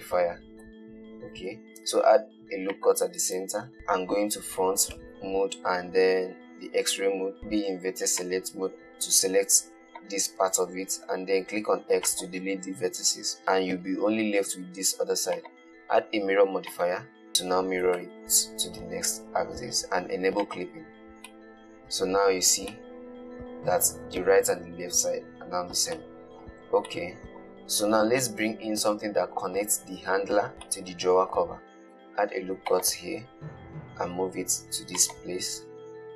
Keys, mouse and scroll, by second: 0.9 Tab, 2.1 ctrl+r, 3.7 KP_1, 5.2 alt+z, 7.4 t, 7.8 1, 8.5 click, 11.7 x, 17.2 click, 18.2 alt+z, 20.7 click, 21.3-21.7 scroll down 1, 21.7-22.7 middle drag, 22.7-23.1 scroll down 2, 23.1-26.1 middle drag, 26.2-28.0 shift+middle drag, 28.0-28.6 scroll up 1, 28.6 scroll up 1, 28.6-32.2 middle drag, 32.2 ctrl+r, 35.8-36.1 scroll up 3.